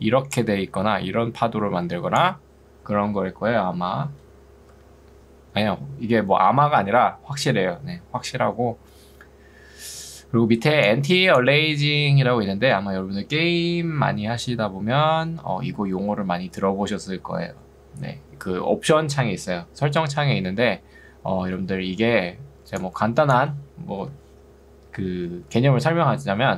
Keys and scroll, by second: 4.7 Escape, 10.5 ctrl+2, 24.1 Escape, 26.3 2.